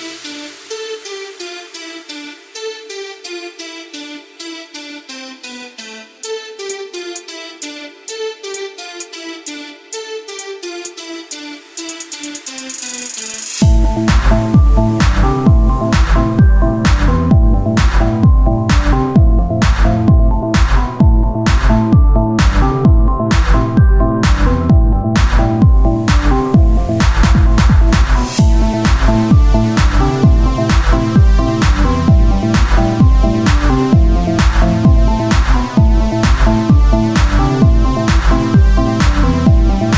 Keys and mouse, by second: 0.1 ctrl+r, 2.2 ctrl+r, 4.7 ctrl+r, 4.7 z, 5.5 g, 6.4 z, 7.0 Tab, 8.7 Tab, 9.6 a, 10.1 a, 10.9 z, 12.2 e, 13.4 ctrl+z, 14.0-15.4 drag, 14.6 e, 17.4 z, 18.5 a, 19.3 ctrl+n, 19.3 a, 19.7 Tab, 21.7 Tab, 24.8 Tab, 26.2 Tab, 26.2 click, 26.3 z, 26.6 c, 27.0 z, 28.4 Tab, 31.2-33.8 drag, 33.6 middle click, 33.6 right click, 33.8 Tab, 34.0 z, 34.3 c, 35.4 z, 37.2 Tab, 39.3 KP_1.